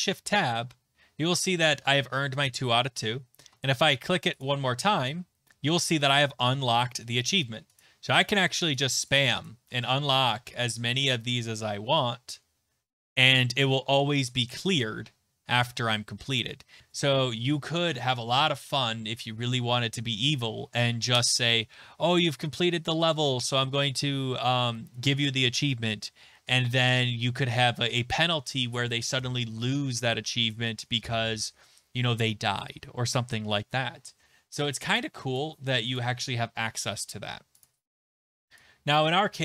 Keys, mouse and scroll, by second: 2.9 Tab, 4.4 click, 7.8 click, 8.2 click, 8.4 click, 8.6 click, 8.7 click, 8.9 click, 9.1 click, 9.3 click, 9.4 click, 11.1 click, 14.6 click, 36.0 click, 37.6 click.